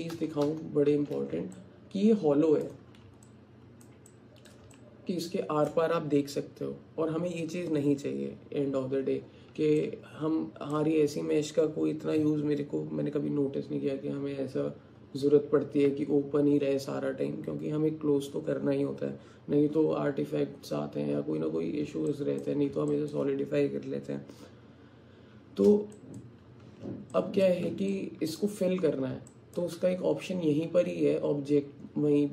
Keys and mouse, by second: 1.6-2.7 alt+drag, 3.3 alt+click, 4.1 shift+click, 4.7-5.7 drag, 9.9 alt+click, 22.1 alt+click, 22.9 alt+click, 26.0 alt+click, 27.2 click, 28.0 alt+click, 29.4 alt+click.